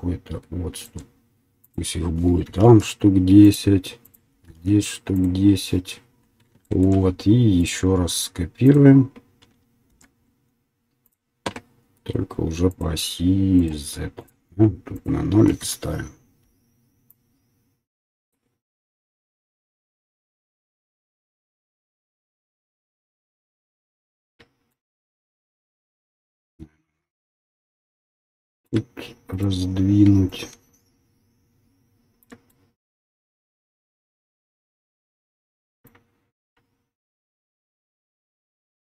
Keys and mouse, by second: 3.7 middle click, 4.0-5.5 drag, 5.5-7.8 middle drag, 7.8-10.2 drag, 10.2 shift+d, 14.5 middle click, 17.7-24.4 right drag, 24.4-27.8 shift+middle drag, 27.8-31.2 shift+right drag, 37.1-38.8 shift+drag.